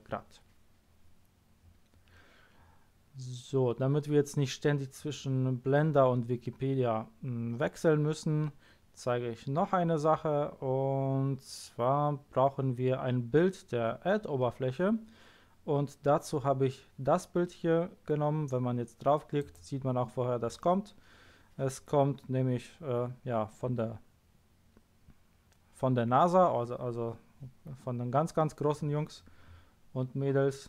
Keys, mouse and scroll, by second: 9.5-10.5 scroll down 2, 10.5-11.0 scroll down 1, 11.0-13.4 scroll down 1, 13.4-16.8 scroll down 1, 30.6 middle click.